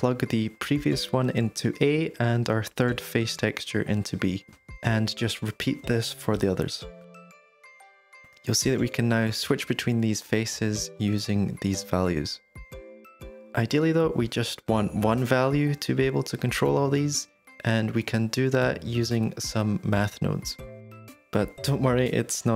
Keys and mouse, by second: 0.3 click, 1.5 click, 1.8 g, 3.0 ctrl+g, 3.3-4.1 middle drag, 4.2 shift+d, 7.3 g, 8.7-9.3 middle drag, 10.2-12.6 drag, 12.9-15.6 drag, 16.3-18.4 drag, 20.5 middle click, 20.7 middle drag, 21.2 click, 21.3 g, 22.2 middle click.